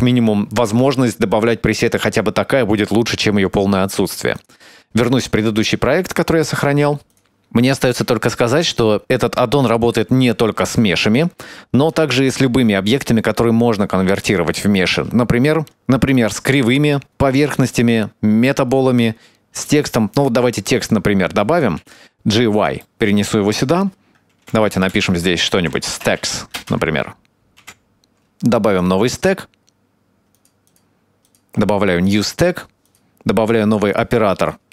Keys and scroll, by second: 14.6 shift+a, 21.8 g, 23.5 Tab, 24.4-26.2 typing, 26.5 Return, 27.4 BackSpace, 27.8 Tab.